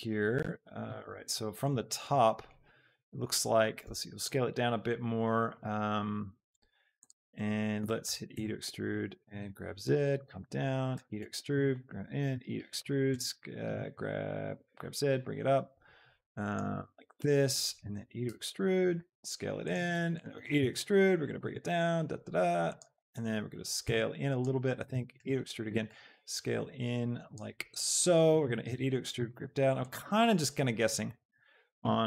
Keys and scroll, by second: 6.6 s, 8.1 e, 8.4 Escape, 9.2 g, 9.5 z, 11.0 e, 11.4 Escape, 11.7 s, 14.7 z, 18.0 e, 18.3 Escape, 19.1 s, 21.3 g, 21.6 z, 24.9 e, 25.3 Escape, 26.0 s, 28.6 Escape, 29.3 z, 31.2 e, 31.5 Escape, 31.9 s.